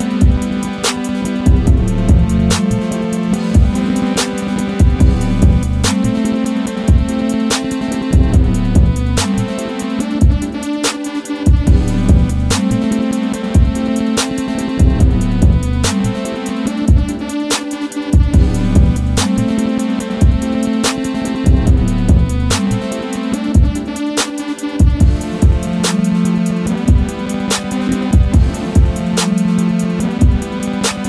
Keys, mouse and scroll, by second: 0.2 click, 1.7-2.5 typing, 3.6-6.5 typing, 9.9 click, 12.1 click, 13.6 Scroll_Lock, 14.1 g, 17.1-20.4 typing, 22.6 typing, 24.4 click, 25.0 d, 26.8 click.